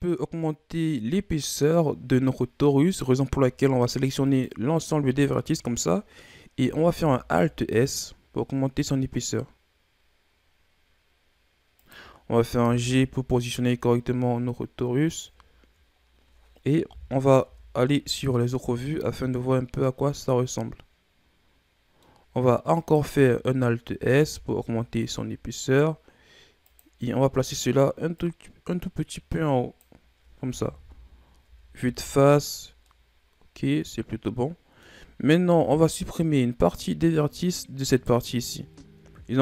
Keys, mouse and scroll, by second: 3.5 a, 4.5 right click, 5.0 a, 5.3 a, 7.0 alt+s, 12.8 g, 16.1-17.0 scroll down 2, 17.0 KP_1, 17.6 Tab, 18.0 a, 18.3 scroll down 2, 18.5-21.5 middle drag, 22.3-22.9 scroll up 3, 22.9 right click, 23.2 Tab, 24.3 alt+s, 28.3-30.9 drag, 30.9 KP_1, 31.6 Tab, 32.0 a, 32.2-33.0 scroll down 5, 33.0-35.8 middle drag, 35.8 KP_1, 36.8-38.0 scroll up 8, 38.0 right click, 38.8-39.4 shift+scroll down 4.